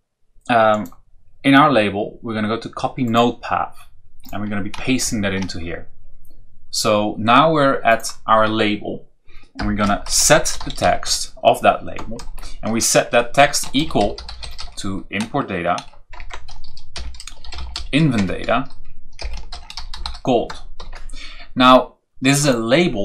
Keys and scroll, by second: 5.0 ctrl+v, 9.6-12.1 typing, 13.4-15.0 typing, 16.1 Return, 17.1-18.2 typing, 19.2-20.7 typing.